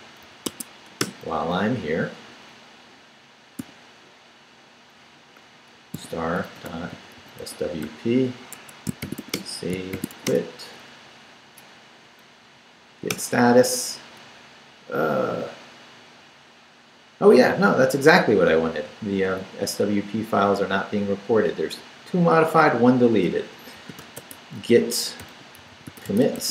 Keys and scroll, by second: 0.0-0.2 typing, 0.5 Tab, 1.0 Return, 3.6 o, 5.9-10.6 typing, 8.5 Escape, 12.0 Up, 13.1 Return, 23.5-26.5 typing.